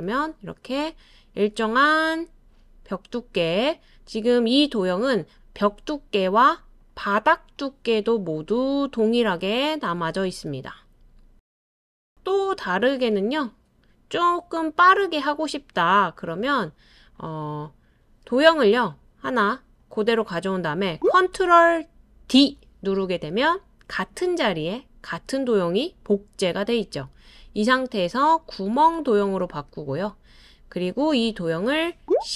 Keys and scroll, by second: 8.3 typing, 22.3 super+d.